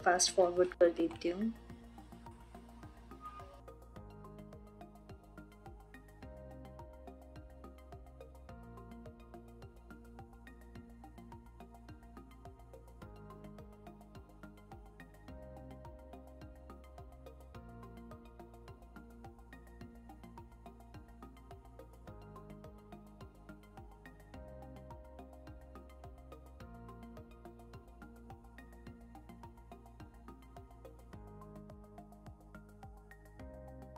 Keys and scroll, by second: 13.8 3, 20.1 3, 23.9 ctrl+l, 29.1 3.